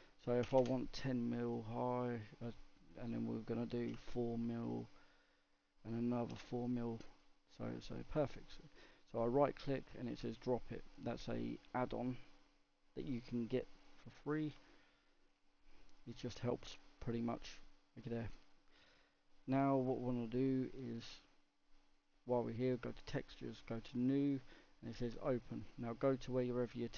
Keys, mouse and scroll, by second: 2.4-4.7 drag, 5.5-7.1 drag, 7.6-8.6 middle drag, 8.6-11.5 right drag, 11.5 click, 11.9-13.0 right drag, 13.0-13.7 scroll up 1, 13.7 scroll down 1, 13.9-22.6 middle drag, 22.6 click, 23.4-26.9 drag.